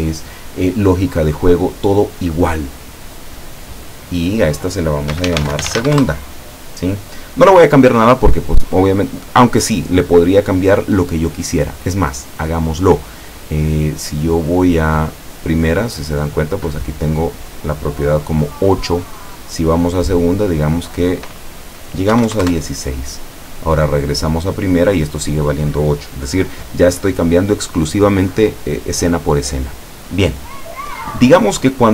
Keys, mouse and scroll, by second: 2.8 click, 4.5 click, 5.2-5.9 typing, 6.1 Return, 14.5 click, 15.2 click, 18.9 click, 19.7 click, 20.6 click, 22.2 KP_1, 22.3 KP_6, 22.5 KP_Enter, 24.0 click, 24.5 click, 31.8 click.